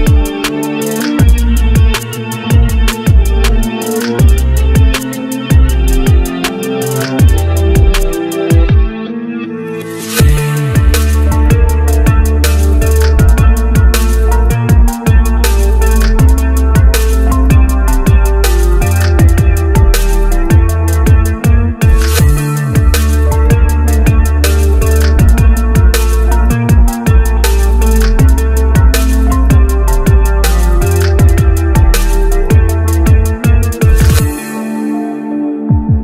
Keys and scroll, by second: 9.9 shift+z.